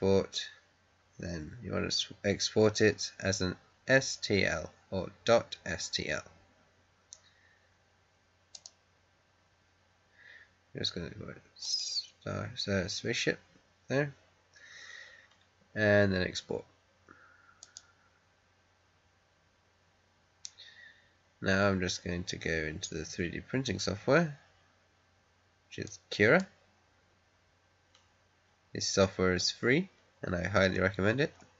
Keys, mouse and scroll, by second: 8.5 click, 11.5 click, 17.5 click, 25.8-28.7 drag, 30.3-31.0 scroll down 2.